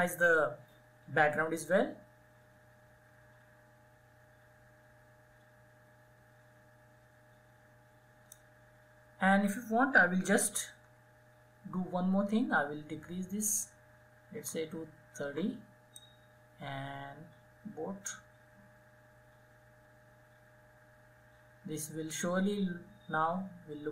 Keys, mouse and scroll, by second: 10.3 [, 13.8 [, 13.8 [, 14.8 [, 15.4-23.9 drag.